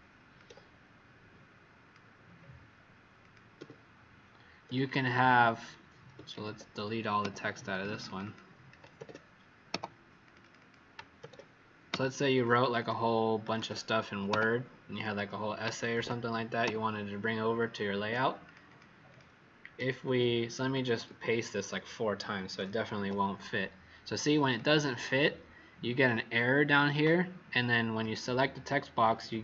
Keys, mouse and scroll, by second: 3.2 click, 3.5 w, 5.0 click, 6.2 ctrl+a, 7.2 Delete, 7.7 click, 7.8 click, 9.7 Delete, 10.2 click, 10.3 click, 11.8 Delete, 12.3 click, 12.5 click, 13.5 click, 14.2 Delete, 14.9 click, 15.9 ctrl+a, 16.6 Delete, 17.9 Escape, 18.4 click, 18.6 click, 21.0-22.9 ctrl+v, 22.9 Escape, 24.4 click.